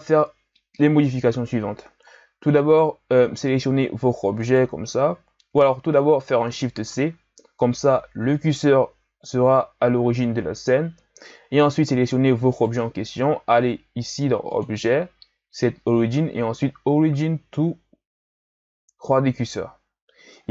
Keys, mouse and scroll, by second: 2.1-2.8 scroll down 3, 2.8-4.4 scroll up 1, 4.4 right click, 6.8 shift+c, 9.6-12.5 scroll up 5, 12.5 right click, 14.5-17.6 drag.